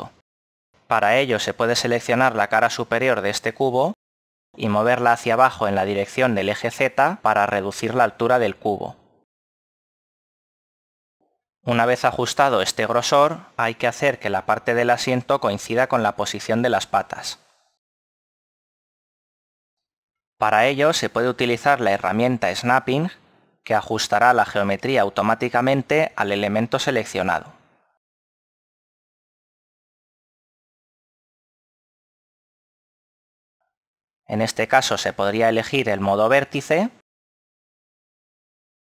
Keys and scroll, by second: 24.3 a, 26.5 l.